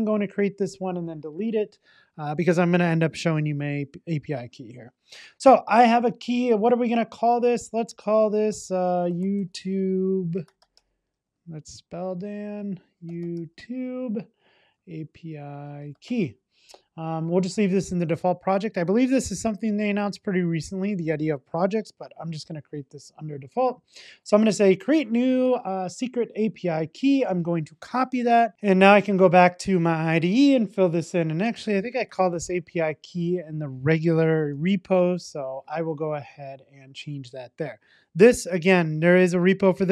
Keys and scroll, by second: 34.5 super+v.